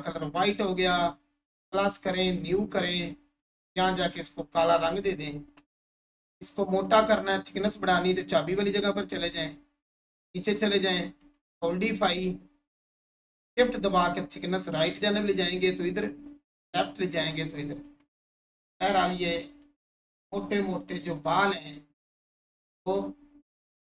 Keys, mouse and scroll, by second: 11.2 click, 13.5-17.3 shift+drag, 17.7 click, 18.0-18.4 scroll down 1, 18.4 1, 18.8-19.2 scroll up 1, 19.6-22.6 alt+shift+drag, 23.7 Delete.